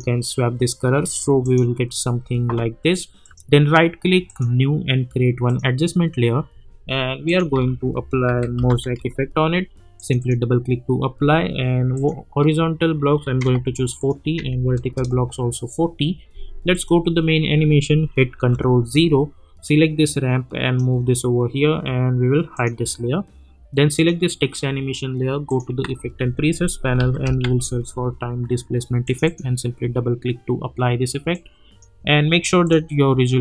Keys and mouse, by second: 3.2 right click, 4.2 click, 7.5 ctrl+a, 8.0-9.4 typing, 10.0 click, 14.9 Return, 16.7 click, 20.3 click, 25.8 ctrl+a, 26.5-27.9 typing, 29.0-32.6 drag.